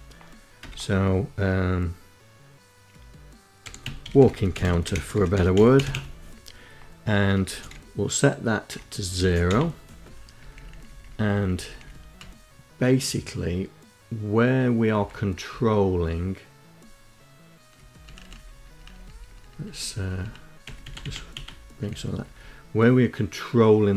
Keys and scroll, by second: 2.4-4.8 typing, 6.4-8.5 typing, 9.4 Down, 9.7 Down, 9.9 Down, 10.0 Down, 10.2 Down, 10.5 Down, 10.6 Down, 10.8 Down, 11.2 Up, 14.5 Down, 17.1 Up, 18.1 Up, 18.3 Up, 18.5 Up, 18.8 Up, 18.9 Up, 19.0 Up, 19.6 Delete, 19.8 Delete, 20.1 Delete, 20.9 Down, 21.3 Down, 21.4 Down, 23.5 Down, 23.8 Up.